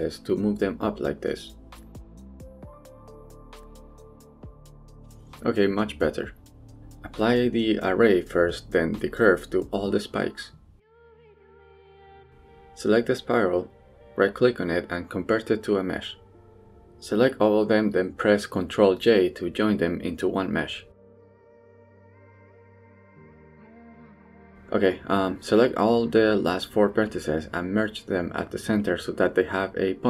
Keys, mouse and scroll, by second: 0.6 click, 0.7 g, 1.5 click, 1.6 g, 3.0 middle click, 3.4 click, 3.6 middle click, 3.8 g, 4.3 click, 4.5 middle click, 4.9-5.7 scroll down 2, 5.1 middle click, 5.7 middle click, 6.1 Tab, 6.3 middle click, 8.4 drag, 9.0 drag, 10.1 click, 10.6 drag, 11.2-11.9 drag, 12.3 click, 13.9-14.8 right drag, 18.6 ctrl+j, 19.3-19.9 middle drag, 20.0 Tab, 20.2 middle click, 20.5 a, 20.8 click, 21.0-22.9 middle drag, 24.1 shift+middle click, 24.9 middle click, 25.9 z, 26.3 1, 26.5 b, 27.6 m, 29.7 middle click.